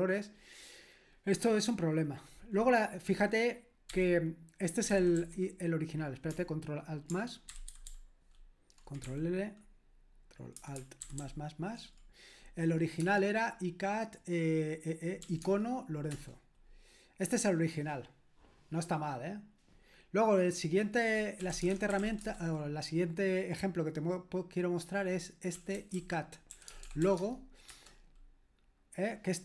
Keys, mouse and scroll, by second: 3.9-5.7 typing, 7.5 ctrl+alt++, 7.7 ctrl+alt++, 7.9 ctrl+alt++, 9.1 c, 11.0 c, 15.2 typing, 15.4 Tab, 16.1 Return, 21.1-22.5 typing, 25.3-27.5 typing, 27.7 Return.